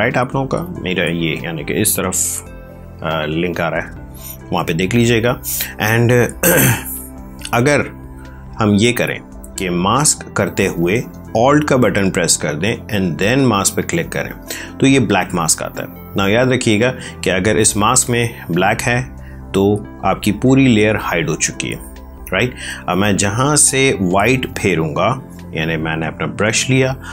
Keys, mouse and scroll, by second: 7.9 ctrl+z, 11.2 ctrl+alt+z, 13.2 alt+click, 26.8 right click.